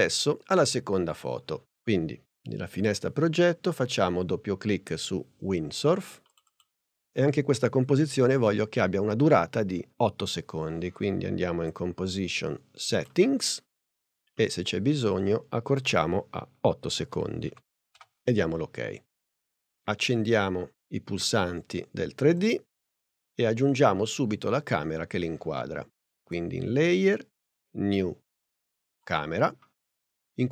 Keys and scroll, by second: 17.0 0, 17.4 8, 18.0 Page_Up.